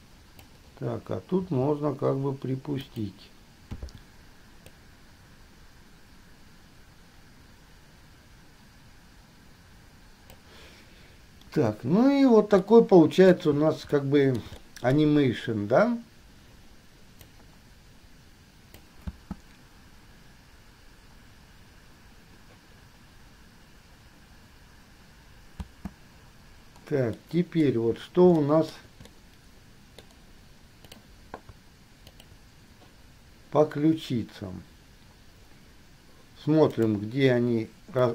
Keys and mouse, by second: 0.1 click, 1.6 g, 4.0 i, 4.9-9.1 drag, 10.1 click, 10.6-11.6 middle drag, 11.6 KP_1, 11.7-12.9 middle drag, 12.9-13.5 drag, 13.5-13.9 middle drag, 14.1 middle click, 15.1 shift+middle click, 17.5-19.1 middle drag, 19.2 space, 25.7 space, 27.4-28.1 drag, 28.7 shift+drag, 29.2-30.2 drag, 31.0 click, 32.4 shift+click, 37.0 click.